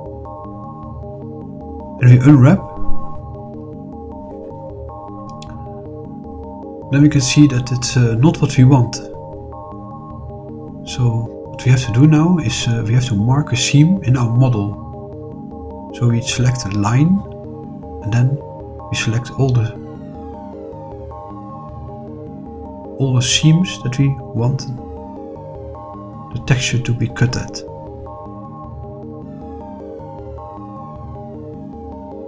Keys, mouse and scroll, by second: 0.6 shift+click, 1.3-4.7 middle drag, 6.3 click, 6.8 click, 7.7 click, 12.5 middle click, 14.4 middle click, 16.0 click, 19.3 click, 22.1-23.7 middle drag, 24.0 middle click, 26.2 shift+click, 26.9 middle click, 27.6 click, 28.2 middle click, 29.6 shift+click, 30.2 middle click, 31.7 shift+click.